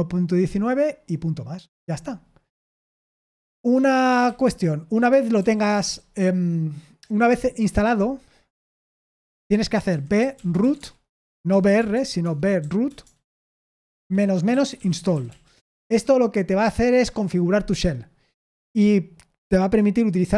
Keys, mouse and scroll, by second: 4.2 typing, 5.3 super+l, 5.8 n, 8.6 Return, 9.6-15.6 typing.